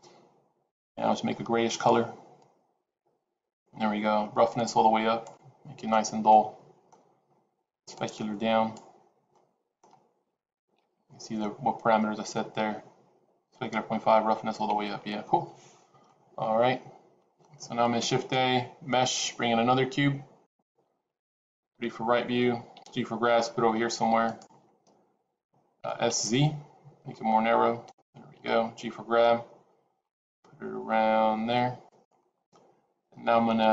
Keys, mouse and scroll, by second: 0.6 click, 4.5 click, 5.5 scroll down 3, 5.8 middle click, 7.8 click, 9.2 middle click, 16.0 middle click, 17.9 shift+a, 21.5 KP_3, 22.6 g, 26.0 s, 28.3 g.